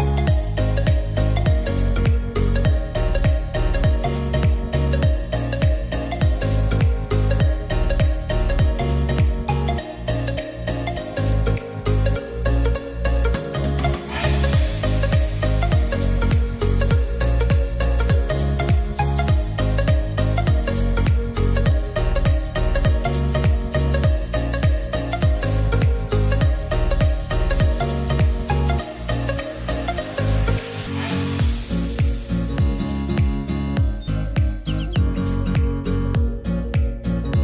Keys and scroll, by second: 21.6-24.3 typing, 29.9-31.8 typing.